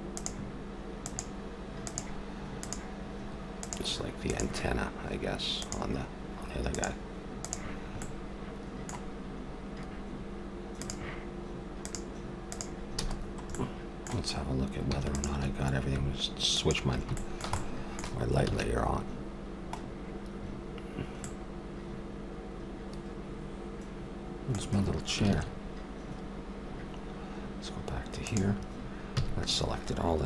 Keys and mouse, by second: 0.1-5.5 drag, 5.6-8.0 drag, 8.0-10.8 middle drag, 10.8-13.5 drag, 13.0 a, 13.5-15.0 middle drag, 15.0-17.6 drag, 17.1-18.3 middle drag, 18.7 shift+z, 23.4-25.2 middle drag, 25.2 shift+z, 28.2-30.0 drag, 29.2 a.